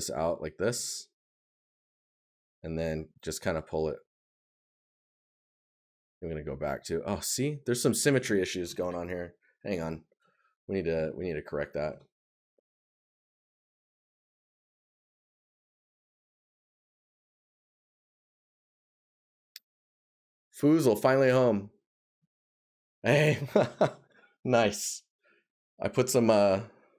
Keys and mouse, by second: 5.5 right click, 10.2 right click, 12.7 right click.